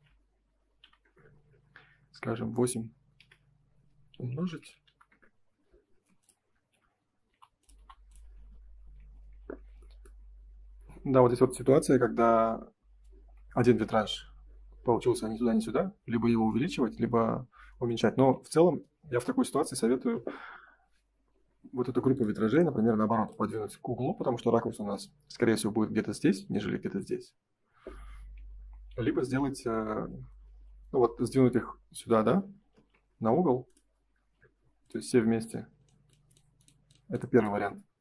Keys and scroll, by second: 0.9 Return, 3.1 F4, 5.0 Return, 5.8 space, 7.2 Delete, 8.9 ctrl+s, 13.9 ctrl+s, 18.3 ctrl+s, 28.8 ctrl+z, 32.7 ctrl+y.